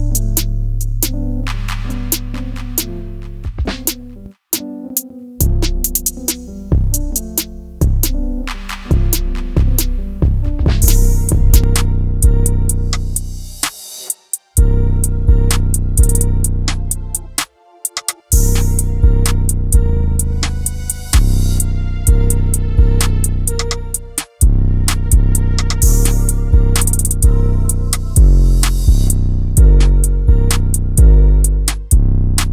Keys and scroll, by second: 22.9 Delete, 29.0 Up, 29.2 Up, 29.4 Up, 29.5 Up, 29.7 Up, 29.9 Up, 30.0 Up, 30.2 Up, 30.4 Up, 30.5 Up, 30.7 Up, 31.2 Up, 31.8 Up, 32.3-32.5 Up.